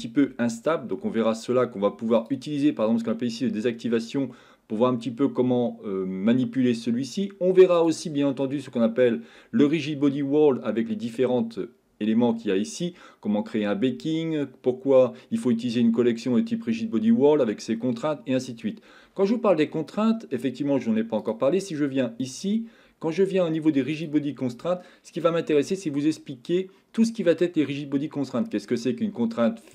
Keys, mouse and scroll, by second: 2.2 click, 7.8 click, 24.0 click, 28.9-29.7 drag.